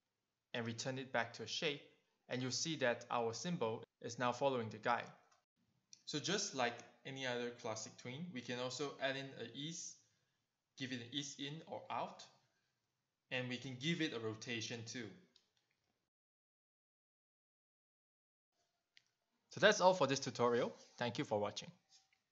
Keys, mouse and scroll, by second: 2.8 click, 5.9 click, 11.4 click, 19.5 click, 20.6 click.